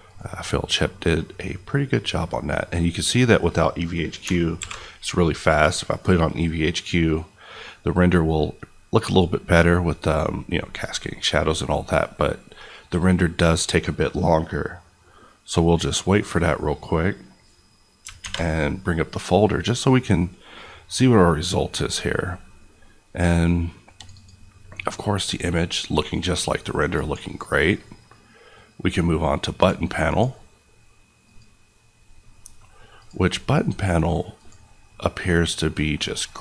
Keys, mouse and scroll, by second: 4.2 alt+click, 4.5 alt+v, 5.4 click, 24.1 click, 32.3 middle click, 32.6-32.9 scroll up 1, 32.9 click, 35.1 middle click.